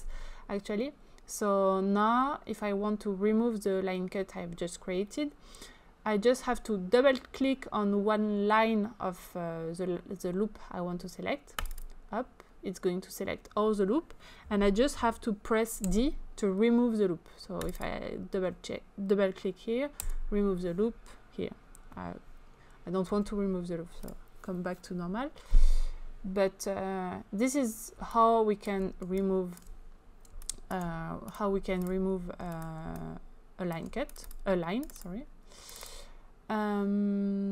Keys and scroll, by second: 15.8 d, 20.1 d, 23.1 ctrl+z.